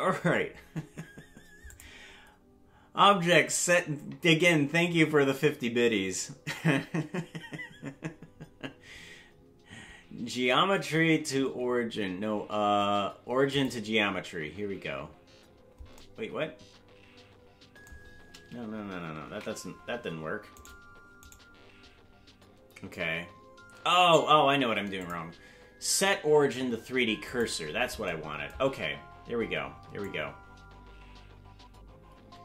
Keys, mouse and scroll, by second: 1.7-13.7 drag, 19.8 ctrl+z, 20.7 right click, 21.4 right click, 25.0-27.4 drag, 30.2-32.4 drag.